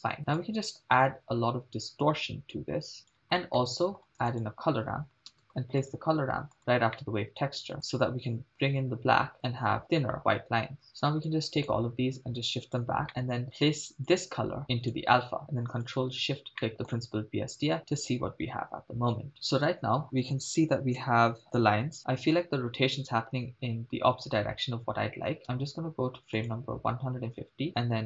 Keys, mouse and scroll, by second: 0.4-3.2 drag, 3.4 middle click, 4.1 shift+a, 7.0 middle click, 7.9-9.3 drag, 10.8 scroll down 5, 10.9 middle click, 11.3-11.7 drag, 12.2 click, 13.1 middle click, 13.1-13.4 scroll up 3, 14.1-15.0 drag, 16.0-16.3 ctrl+shift+drag, 16.6 middle click, 21.0 shift+space, 25.4 shift+space, 26.5 drag.